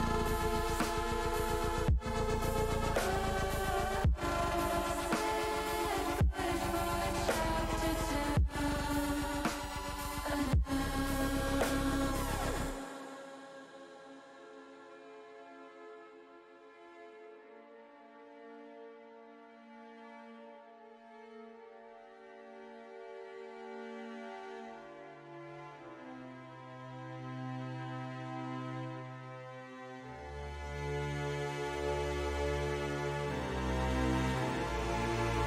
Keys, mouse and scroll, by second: 0.9 click, 1.5-3.1 drag, 3.4 click, 3.8 middle click, 5.5 click, 6.2 click, 7.4 click, 8.0 click, 8.3 middle click, 9.7 middle click, 11.6 shift+middle click, 12.6 click, 13.1 click, 14.2 g, 14.4 g, 15.9 click, 16.7 middle click, 18.5 middle click, 19.3 middle click, 20.1 middle click, 23.4 click, 24.2 alt+shift+click, 26.4 u, 29.8 shift+middle click, 30.6 shift+middle click, 31.5 middle click, 33.2 shift+middle click.